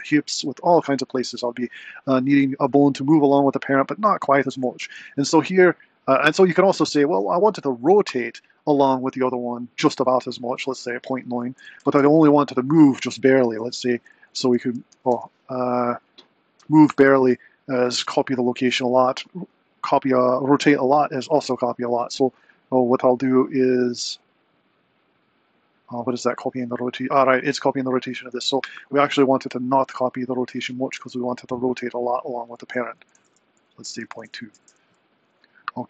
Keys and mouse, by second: 6.9 r, 8.6 click, 11.1-12.4 drag, 13.1-17.9 drag, 29.8-32.3 drag, 32.6-35.4 drag, 34.1 BackSpace.